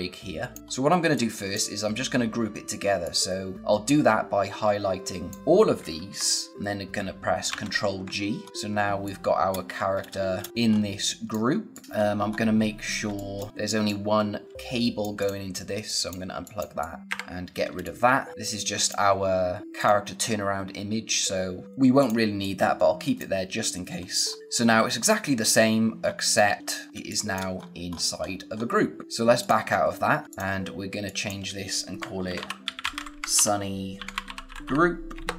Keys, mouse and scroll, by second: 0.6 scroll up 1, 0.9 space, 1.4 click, 1.4 space, 1.7-2.8 scroll down 1, 2.9 click, 7.4 ctrl+g, 8.3 scroll up 1, 8.9 click, 9.4 space, 10.5 scroll up 1, 11.6 click, 11.8-12.9 scroll up 1, 12.9 space, 13.1 click, 14.2 space, 15.1 click, 17.6 space, 17.7 click, 18.1 space, 18.3 click, 19.1-19.6 scroll up 1, 19.7 click, 20.2-21.1 scroll down 1, 21.1 click, 23.5-24.2 scroll down 1, 24.2 scroll up 1, 24.4-24.9 scroll down 1, 25.9-26.7 scroll up 1, 26.7 scroll down 1, 26.9 space, 27.0 click, 27.3 space, 27.5-29.0 scroll up 1, 29.0 click, 29.8-30.1 scroll down 1, 30.1 scroll up 1, 30.2 click, 32.0-35.1 typing.